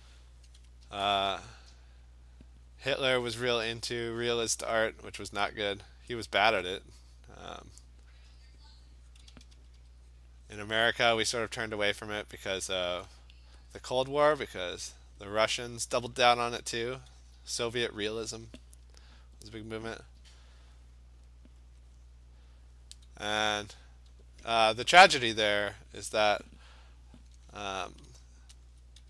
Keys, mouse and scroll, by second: 0.8 [, 1.2 [, 1.8 click, 3.4 click, 4.0 click, 5.0 click, 6.2 alt+click, 6.3 alt+click, 6.6 click, 6.8 alt+click, 8.3 click, 8.5 click, 9.2 click, 9.3 ], 9.5 ], 9.8 ], 10.2 click, 10.6 click, 11.3 click, 11.7 click, 12.2 click, 12.8 click, 13.0 click, 13.7 alt+click, 14.5 click, 14.9 click, 15.2 click, 15.6 click, 16.3 [, 16.6 [, 18.0 alt+click, 18.3 [, 19.6 click, 20.1 click, 21.2 click, 21.7 click, 22.0 click, 22.7 click, 23.0 alt+click, 24.1 [, 27.3 [, 28.7 alt+click.